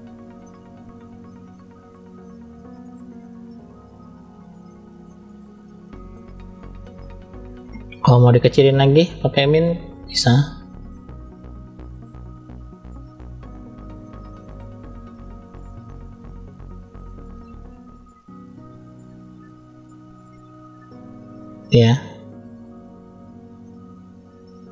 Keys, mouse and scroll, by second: 0.3 middle click, 1.1 click, 1.9 click, 2.4 middle click, 3.4 click, 4.7 scroll down 2, 5.0-6.0 middle drag, 6.4-7.7 scroll up 1, 7.7 click, 9.1 click, 9.8 scroll up 1, 9.9 middle click, 10.6-11.4 scroll down 2, 11.4 f, 13.1 click, 14.8 click, 15.1 middle click, 16.0 click, 16.9 middle click, 17.9 click, 18.9 middle click, 19.8 click, 21.0 middle click, 21.9 middle click, 22.6 click, 23.5 middle click, 23.9 scroll down 1, 24.1 click, 24.5 middle click.